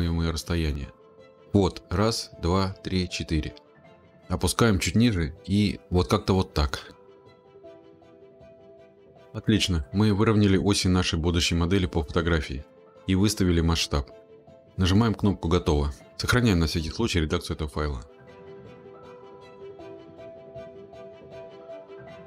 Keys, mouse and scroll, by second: 0.8 click, 4.1-5.9 drag, 12.2 click, 14.6 click, 18.9 ctrl+ы, 19.0 click, 19.5 click, 21.3 click, 21.7 Right, 21.9-22.2 typing.